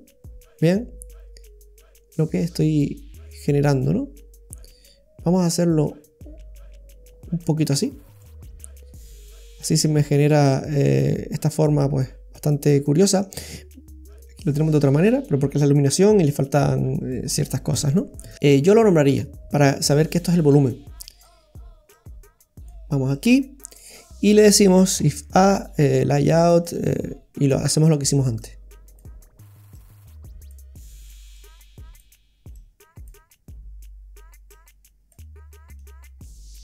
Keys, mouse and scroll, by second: 7.8-8.2 scroll up 2, 8.2 middle click, 13.8 middle click, 16.6-17.2 scroll down 2, 17.2-18.0 scroll up 2, 18.3 middle click, 18.3 scroll down 10, 19.2 click, 20.6 click, 24.9 shift+a, 28.4 click, 29.7 click, 31.4 click, 32.5 click, 34.5 click, 35.8 click.